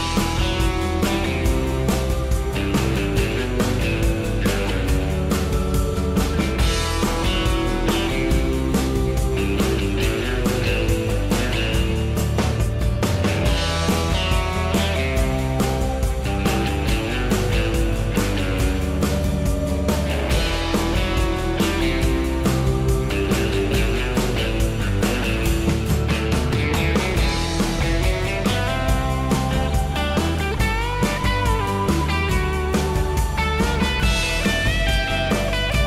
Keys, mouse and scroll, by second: 5.6 o, 8.9 s, 12.6 m, 24.8 s, 28.5 m, 33.7 s.